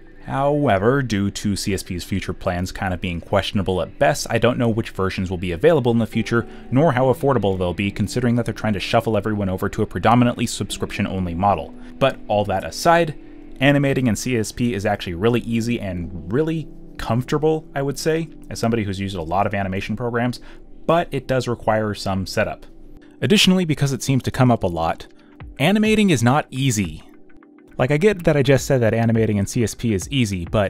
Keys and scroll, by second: 0.2 1, 0.6 shift+f, 6.7 b, 9.5 space, 9.5 b, 10.4 space, 11.4 space, 11.5 z, 13.1 b, 16.4 ctrl+z, 17.3 space, 19.6-22.3 typing, 20.6 alt+f, 25.3 e, 26.7-30.0 typing, 27.7 ctrl+z.